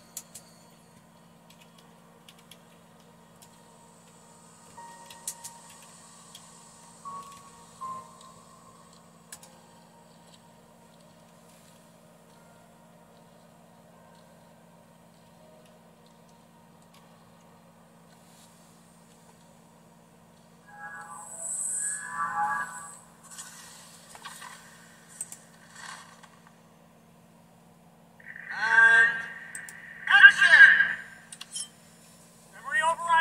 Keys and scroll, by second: 0.0-3.4 typing, 4.7-7.8 typing, 9.3 typing, 15.3 super+3, 17.0 super+4, 32.9 super+4.